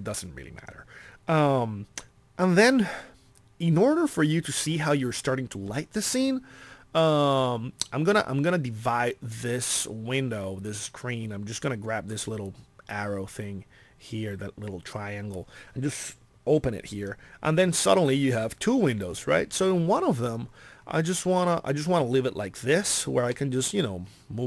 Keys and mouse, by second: 13.6 click, 14.1 middle click, 14.3 click, 14.4 middle click, 20.6 middle click, 20.7 middle click, 22.4 middle click.